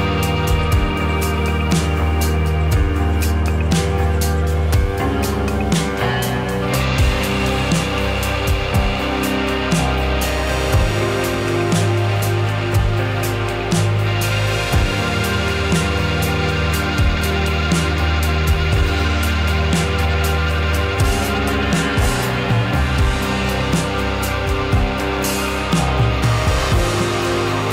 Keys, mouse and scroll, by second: 0.1-0.7 drag, 0.9-1.6 middle drag, 1.6 `, 1.8 `, 2.4-3.2 middle drag, 3.2 `, 5.1 r, 5.4 click, 5.7 r, 7.1 drag, 7.5 `, 8.5 click, 11.6 alt+d, 14.4 shift+r, 14.6 shift+r, 14.8 shift+r, 16.3 click, 19.8-22.3 middle drag, 22.3 click, 22.9 r, 23.8-24.4 middle drag, 24.4 drag, 24.6-25.6 middle drag, 25.6 drag, 25.8-26.1 middle drag, 26.1 r, 26.7 click, 26.8-27.7 middle drag.